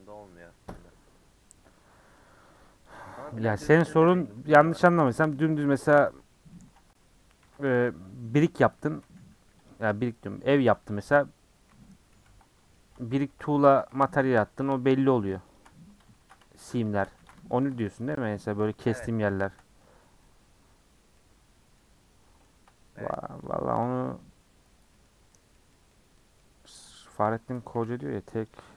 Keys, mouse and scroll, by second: 2.2-2.9 middle drag, 2.9 click, 3.6 KP_Decimal, 3.9-4.2 middle drag, 4.2 scroll up 2, 4.5 shift+middle drag, 4.7 scroll down 1, 4.8-5.2 shift+middle drag, 5.2 Tab, 5.3 middle click, 5.6-6.0 scroll up 3, 6.0-7.4 middle drag, 7.4 ctrl+r, 8.9 a, 9.7 u, 11.0 ctrl+z, 11.7 ctrl+z, 12.1 ctrl+z, 12.7 middle click, 13.2 ctrl+z, 14.3 alt+click, 14.7 middle click, 15.5 alt+shift+click, 16.2 ctrl+z, 16.7 alt+shift+click, 17.2 ctrl+z, 17.6 alt+shift+click, 18.2-19.5 middle drag, 19.5 scroll up 2, 19.8-21.8 middle drag, 21.8-22.2 scroll up 2, 22.2-23.5 middle drag, 23.5 click, 23.7 middle click, 25.0 middle click, 25.7-26.2 scroll down 2, 25.8 middle click, 26.2-27.2 middle drag, 27.2 click, 27.7 a, 28.5 u.